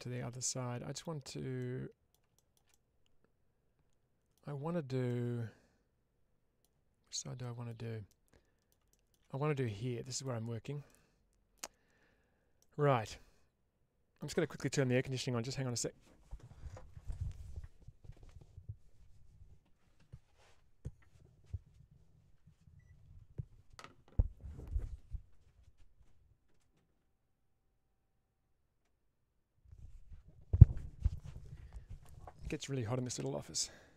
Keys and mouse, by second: 1.5 middle click, 2.2 shift+middle click, 4.9-6.5 middle drag, 7.3 shift+middle click, 8.0 middle click, 9.5 middle click, 10.7 middle click, 12.5-14.0 middle drag.